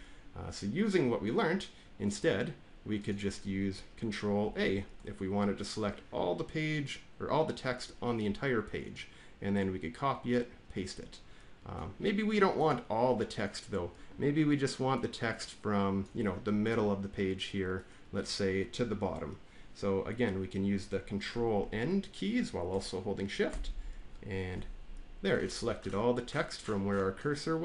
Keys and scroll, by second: 4.3 ctrl+a, 23.4 ctrl+shift+End.